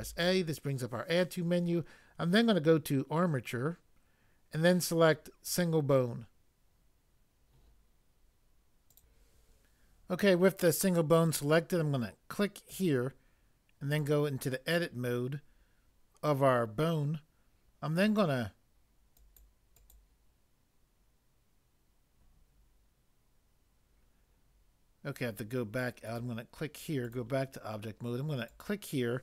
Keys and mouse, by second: 5.5 click, 8.9 click, 9.0 click.